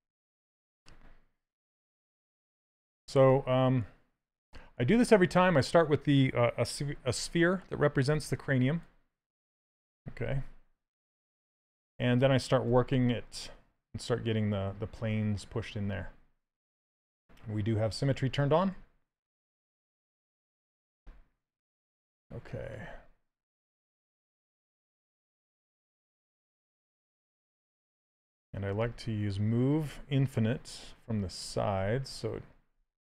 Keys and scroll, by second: 7.8 s, 12.3 s, 14.7 s, 18.4 s.